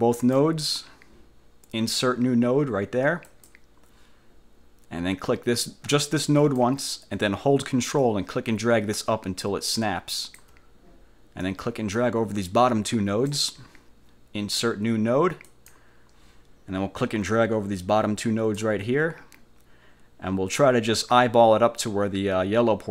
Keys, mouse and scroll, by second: 3.4 click, 6.5 click, 8.1-10.6 ctrl+drag, 11.5-13.6 drag, 15.6 click, 17.1-18.8 drag, 20.6-22.9 drag.